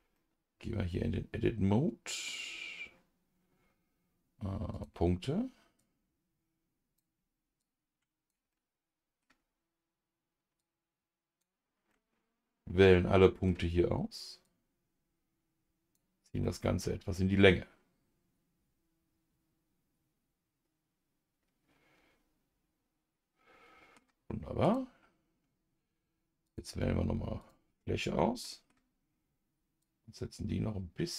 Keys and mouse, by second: 0.1-2.3 middle drag, 4.7 click, 5.8-8.5 drag, 8.5 middle click, 10.6-11.9 shift+drag, 11.9-13.5 middle drag, 14.4-15.9 drag, 16.4-23.9 middle drag, 24.6-26.5 drag, 27.4 click, 28.4 middle click, 29.8 click, 30.3 click.